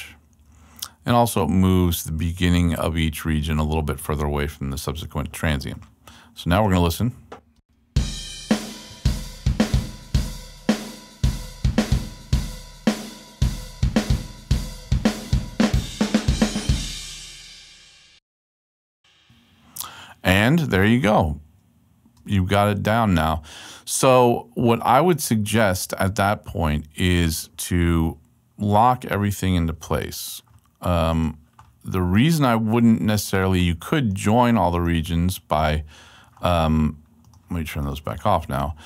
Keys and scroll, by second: 0.8 super+Left, 4.0 super+Left, 7.5 space, 22.1 space.